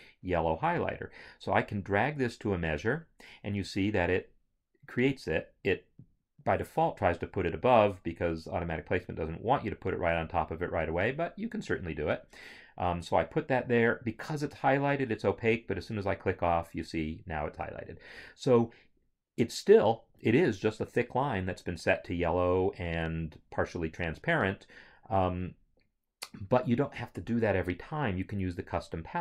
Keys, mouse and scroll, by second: 0.8 click.